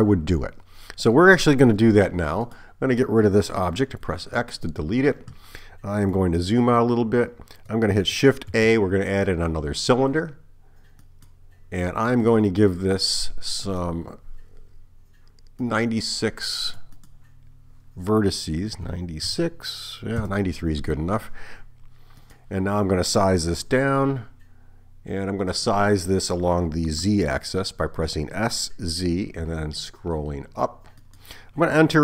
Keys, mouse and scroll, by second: 2.5 click, 4.0 x, 8.5 shift+a, 13.9 click, 15.7 click, 17.1 click, 22.3 click, 23.7 s, 28.4 s.